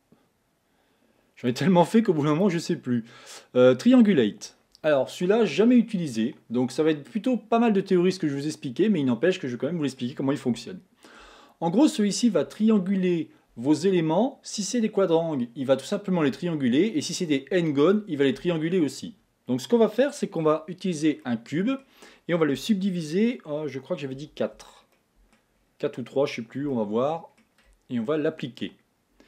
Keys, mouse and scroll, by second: 1.4 click, 2.3-5.3 drag, 9.4-14.8 middle drag, 21.4-24.2 middle drag, 24.2 ctrl+4, 24.9 middle click, 25.6-26.6 scroll up 4, 27.1-29.2 shift+middle drag.